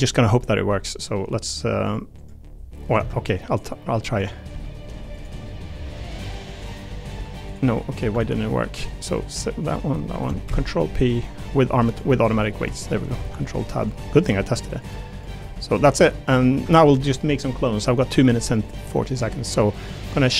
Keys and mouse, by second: 0.5 middle click, 1.1 middle click, 1.9-2.9 drag, 3.0 ctrl+Tab, 4.2 click, 4.5 g, 5.8 Tab, 6.1 click, 7.1 r, 8.2 ctrl+Tab, 10.4 ctrl+p, 13.2 ctrl+Tab, 13.8 click, 14.4 r, 15.1 click, 15.4 r, 15.7 click, 16.5 ctrl+Tab, 17.7 click.